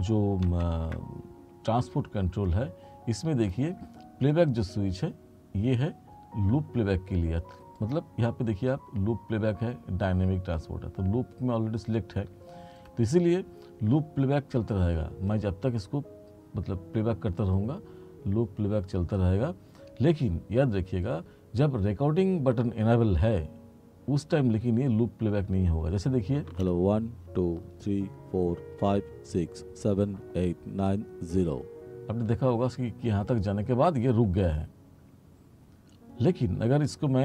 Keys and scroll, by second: 0.6 ctrl+1, 26.5 space.